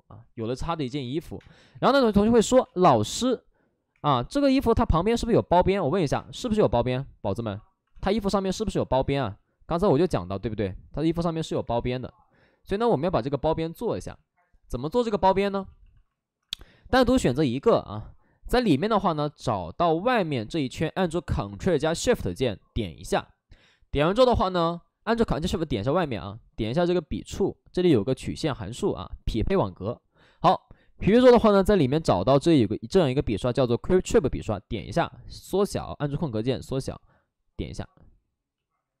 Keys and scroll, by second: 1.3 space, 1.6 3, 1.7 space, 3.8 space, 3.8 3, 5.9 ctrl+z, 6.0 space, 7.9 space, 9.0 space, 11.5 space, 11.5 3, 15.7 space, 15.7 shift+f, 16.3 alt+s, 21.8 alt+s, 34.7 space, 35.2 space.